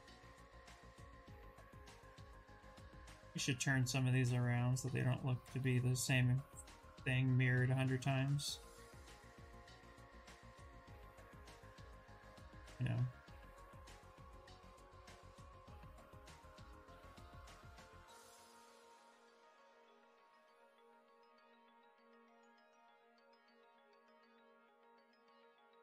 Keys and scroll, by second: 9.8 q, 14.6 shift+f, 15.5 2, 22.8 ctrl+e, 23.5 Escape, 24.2 ctrl+w.